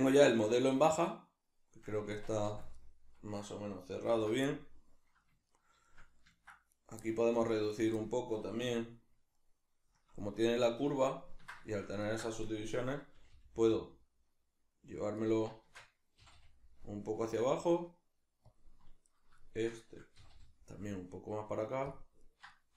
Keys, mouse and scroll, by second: 2.1 Tab, 4.1 alt+h, 6.7 right click, 7.0 middle click, 7.7 shift+right click, 8.0-15.3 middle drag, 8.6 \, 10.0 KP_Decimal, 13.2 g, 15.3 right click, 15.6 shift+Tab, 18.6 click, 19.0 right drag, 19.4 shift+right click, 20.2 g, 22.0 click, 22.2 right click, 22.5 shift+right click.